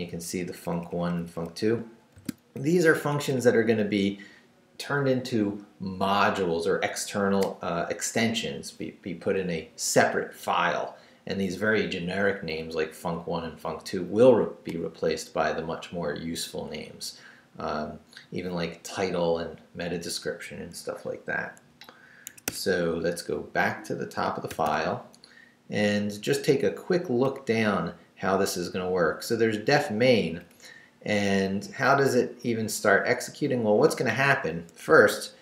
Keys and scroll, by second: 0.3 Up, 1.8 shift+Up, 2.1 shift+v, 2.5 shift+Down, 22.3 Escape, 24.5 shift+g, 25.3 Down, 27.3 Down, 29.1 Down, 30.5 Up, 33.6 Up, 34.9 shift+Up.